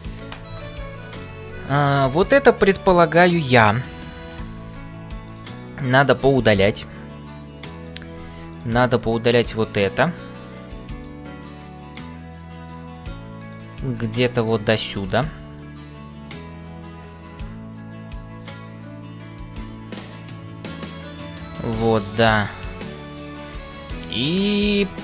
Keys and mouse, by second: 0.0-25.0 typing, 1.7-4.5 middle drag, 5.8-7.4 middle drag, 7.9 click, 9.1-11.2 middle drag, 12.0 click, 14.9-22.9 middle drag, 23.6 middle click.